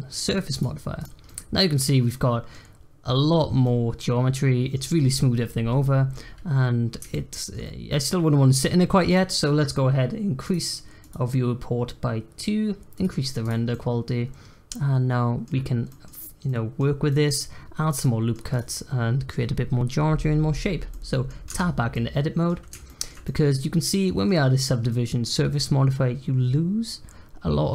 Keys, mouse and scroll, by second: 1.2-6.3 middle drag, 6.3-6.9 scroll up 1, 7.1-9.0 shift+middle drag, 9.0 click, 10.4 click, 13.7-18.5 middle drag, 18.5 click, 20.9 middle click, 21.5 Tab, 21.9-27.7 middle drag.